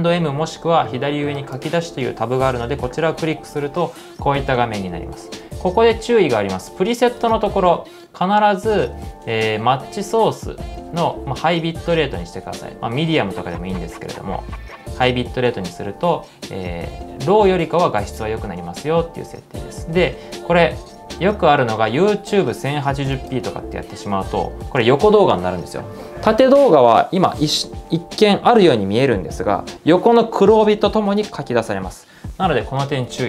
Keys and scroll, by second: 5.7-6.5 typing, 7.7-9.4 typing, 19.1-20.8 typing, 21.9-22.6 typing, 32.6-33.2 typing.